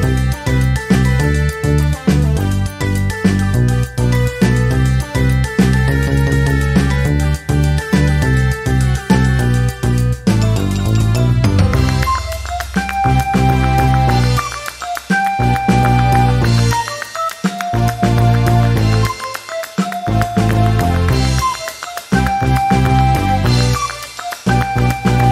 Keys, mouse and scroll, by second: 0.0 click, 1.4 click, 3.3 ctrl+d, 4.0 ctrl+s, 5.0 d, 5.3 click, 6.2 click, 7.7-9.2 drag, 9.4 click, 10.2 click, 11.0-13.8 drag, 15.4 click, 16.0 click, 17.0-20.4 drag, 20.6-21.2 ctrl+scroll up 3, 21.6-22.8 ctrl+drag, 23.5 click, 24.6-25.3 drag.